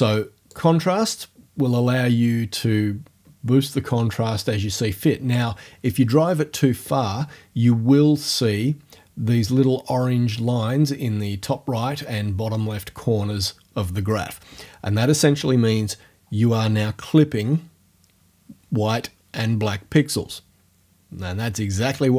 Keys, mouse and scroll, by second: 0.5-5.5 drag, 5.5-7.7 middle drag.